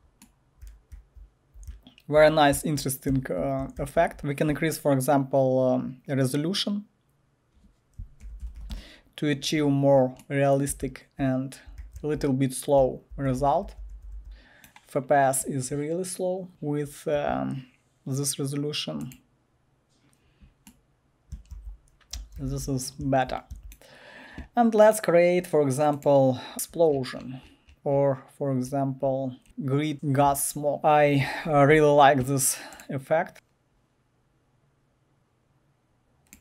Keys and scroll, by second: 0.4-4.7 typing, 8.0-9.1 typing, 10.4-14.2 typing, 21.1-23.5 typing, 33.3 Return.